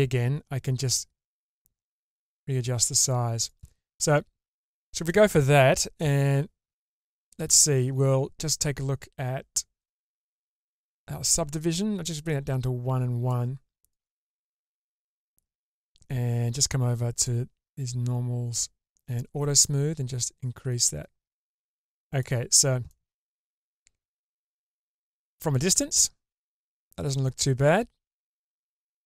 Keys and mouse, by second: 3.9-5.0 middle drag, 5.9 Tab, 7.1 middle click, 7.8 Tab, 9.8 click, 12.1-13.3 drag, 13.9 click, 14.7 Tab, 17.1 click, 19.5-22.2 drag, 22.9-24.6 middle drag, 25.3-29.0 middle drag.